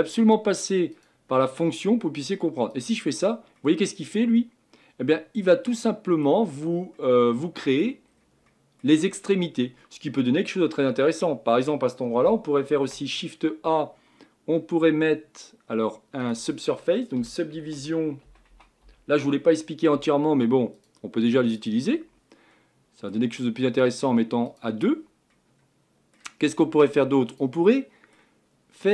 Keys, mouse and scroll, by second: 3.6-6.5 middle drag, 6.5-6.9 scroll up 3, 6.9-8.1 middle drag, 8.1-8.5 scroll down 1, 8.5-20.8 middle drag, 22.5-24.5 middle drag, 24.5-25.3 drag, 25.3-28.9 middle drag.